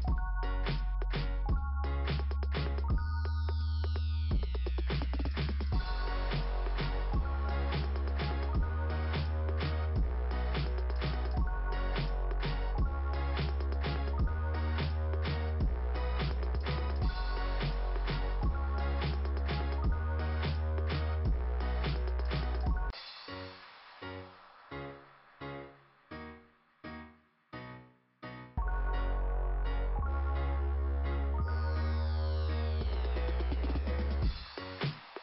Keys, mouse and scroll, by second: 0.0 scroll down 2, 2.4 click, 4.4-5.4 scroll down 2, 9.4 click, 9.7 click, 9.9 click, 10.0 click, 10.2 click, 13.3 scroll up 2, 15.9 scroll up 2, 20.3 scroll down 2, 21.6 scroll down 2, 22.6 click, 22.9 click, 24.1 click, 24.2 click, 26.0 click, 26.1 click, 27.8 click, 27.9 click, 29.8 click, 29.9 click, 31.4 click.